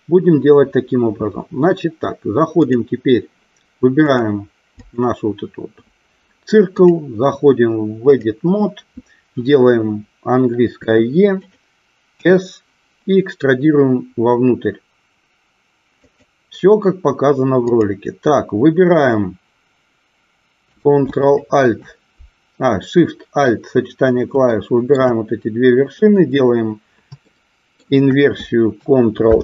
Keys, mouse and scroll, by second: 2.6-3.3 drag, 4.0 click, 4.8 click, 6.7-8.3 drag, 10.8 e, 11.3 click, 12.1 s, 16.0 click, 17.7 click, 24.4 shift+middle click, 27.2 shift+middle click, 29.3 ctrl+i.